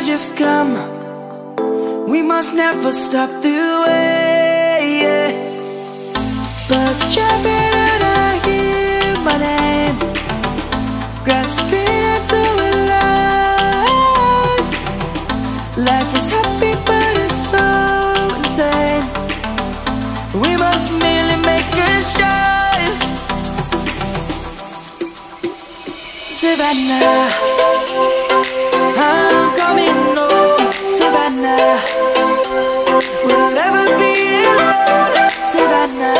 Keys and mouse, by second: 0.2 click, 1.1 shift+middle click, 2.3 s, 4.8 click, 10.2 click, 14.1 click, 18.1 a, 20.4 s, 26.6 s, 27.8 click, 31.1 ctrl+b, 34.6 Tab.